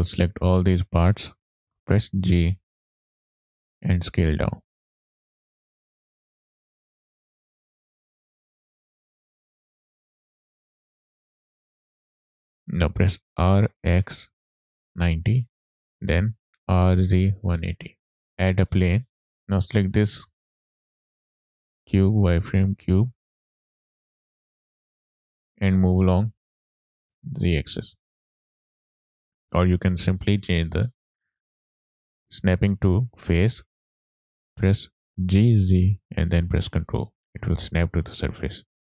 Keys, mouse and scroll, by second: 1.8 g, 3.3 click, 3.8 s, 4.9 click, 5.2 scroll up 2, 5.4 shift+middle click, 5.5-7.5 typing, 5.8 click, 7.0 click, 7.9-8.6 scroll down 3, 8.2 click, 8.5 middle click, 8.8 click, 9.0 scroll up 2, 9.0 shift+middle click, 9.2 shift+middle click, 10.0 click, 10.6 click, 11.4 alt+g, 11.5 shift+middle click, 11.5 scroll up 2, 11.6 middle click, 12.0 scroll down 2, 12.0 scroll up 1, 12.2 shift+middle click, 12.6 middle click, 13.5-15.2 typing, 15.8 KP_Enter, 15.8 click, 15.8 scroll up 2, 16.0 shift+middle click, 16.6-17.8 typing, 19.3 middle click, 19.3-19.8 scroll down 2, 20.4 click, 22.5 click, 23.2-23.7 scroll up 3, 24.2 scroll up 1, 24.6 shift+middle drag, 26.4 g, 26.9 z, 27.9 click, 28.2 scroll down 1, 28.4-28.9 middle drag, 30.2-33.7 drag, 35.2 g, 35.7 z, 37.0 ctrl+click, 37.5-38.3 middle drag, 38.5-38.9 scroll down 2.